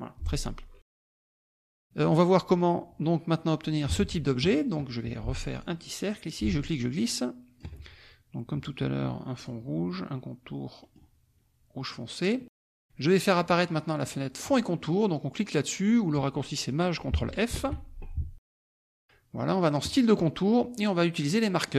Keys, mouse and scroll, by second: 1.2 alt+Tab, 3.9 alt+Tab, 4.4 alt+click, 5.5 click, 6.4-7.8 ctrl+drag, 9.4 click, 10.9 middle click, 13.5 click, 14.0 click, 17.8 ctrl+shift+f, 19.8 click, 21.6 click.